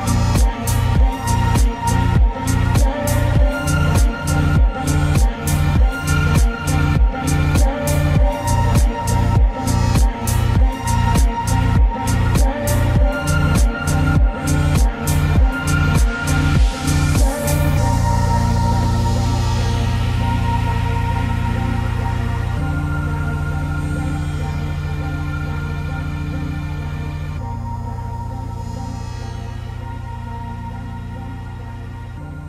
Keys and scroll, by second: 21.9 ctrl+z.